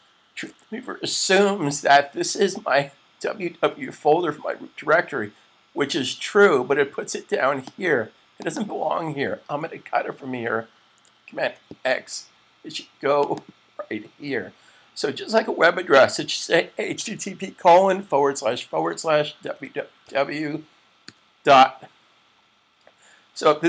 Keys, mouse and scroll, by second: 0.3 Tab, 7.7 click, 8.2 double click, 10.6 super+x, 12.9 double click, 13.4 double click, 14.1 Left, 19.2-20.9 typing.